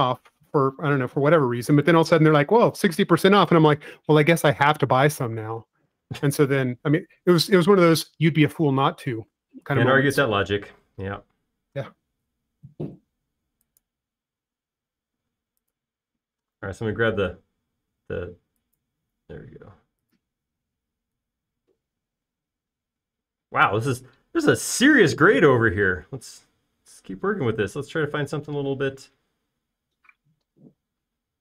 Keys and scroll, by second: 1.2-2.4 typing, 22.2 space, 27.4 m.